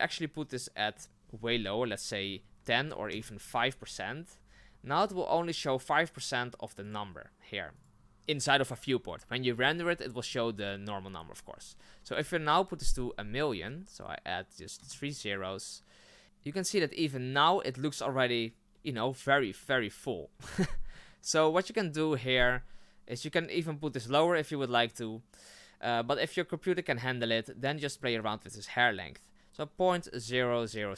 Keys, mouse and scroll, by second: 3.1-4.5 drag, 4.5 scroll down 2, 16.2-17.0 scroll down 5, 17.0 scroll up 2, 19.6-20.2 scroll up 5, 20.9 scroll up 1.